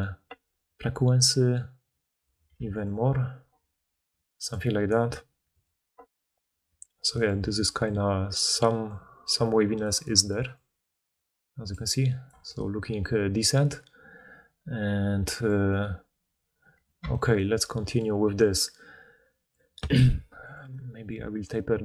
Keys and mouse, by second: 0.8-2.2 right drag, 2.2 middle click, 2.8-5.4 right drag, 5.4-6.4 middle drag, 7.3-11.7 typing, 14.0-14.6 drag, 14.0-14.6 middle drag, 14.0-14.6 right drag, 16.9-20.5 shift+middle drag, 20.5-21.8 right drag.